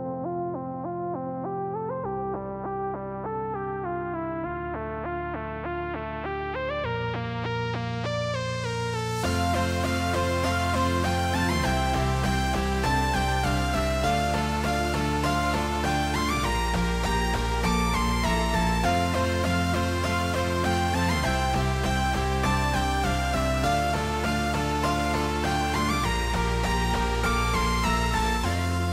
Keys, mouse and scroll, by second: 2.0 b, 4.2-6.2 drag, 7.5 shift+middle click, 8.3 click, 10.3 click, 12.8 shift+middle drag, 15.0 shift+middle click, 16.3 click, 18.9 shift+middle click, 22.7 click, 24.0 shift+middle drag, 25.9-26.3 shift+middle drag, 26.5 shift+middle click, 27.9 shift+middle drag, 28.6 click.